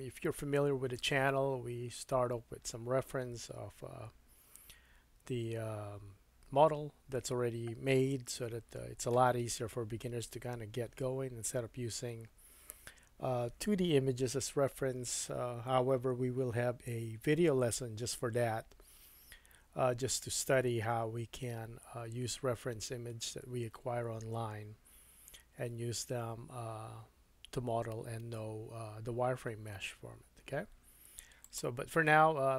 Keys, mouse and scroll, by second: 0.8-2.2 scroll up 3.